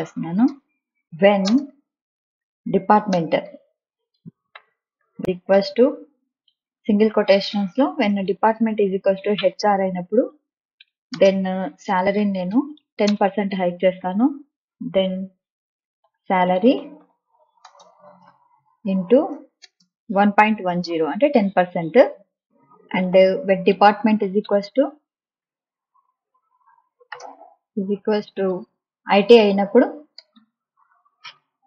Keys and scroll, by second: 0.0-6.7 typing, 1.0 Return, 7.3 Left, 8.3 shift+h, 8.9 shift+r, 9.6 Right, 10.7-13.2 typing, 15.4-17.5 typing, 19.0 shift+8, 19.5 space, 23.0 Return, 23.1-28.7 typing, 29.3 Left, 30.3-31.6 typing, 31.4 Right.